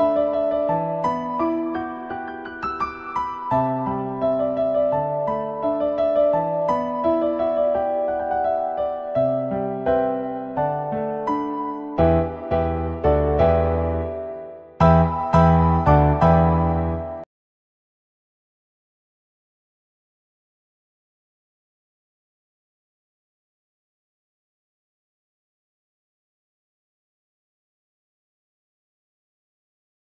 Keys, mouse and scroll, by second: 0.4 middle click, 1.7-3.7 drag, 4.8-5.1 middle drag, 6.5-8.5 drag, 8.9-9.3 middle drag, 9.6 shift+middle drag, 9.9 middle click, 10.8-12.3 middle drag, 12.5 shift+middle click, 13.7-14.6 middle drag, 14.8 middle click, 15.8 shift+middle click, 16.8-17.8 middle drag, 19.0-21.7 drag, 23.8 click, 24.0-24.6 middle drag, 25.7-27.7 drag, 27.9-28.4 middle drag, 29.2 shift+middle click.